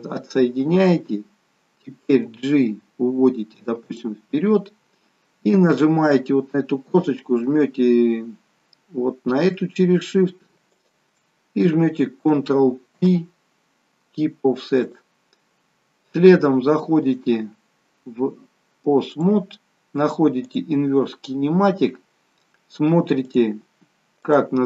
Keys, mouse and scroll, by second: 2.1 g, 10.9 shift+click, 13.0 ctrl+p, 17.2 click, 20.6 click, 23.4 click.